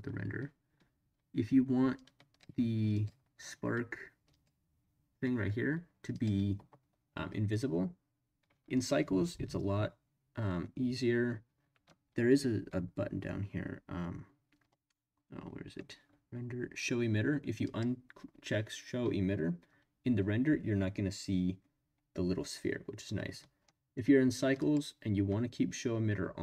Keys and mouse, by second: 2.0-2.4 drag, 2.9 click, 4.3 click, 6.1 click, 17.6 click, 24.6 click.